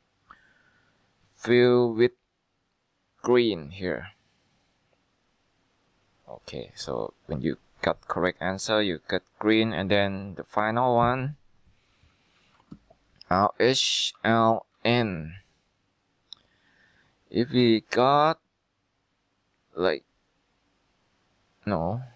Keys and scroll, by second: 13.5 h, 14.3 l, 14.8 n.